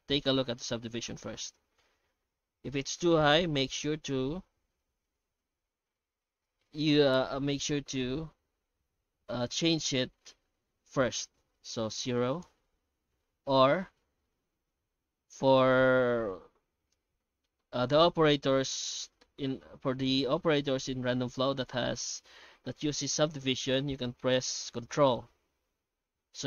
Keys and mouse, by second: 14.0 ctrl+z, 14.4 shift+q, 24.8 shift+q.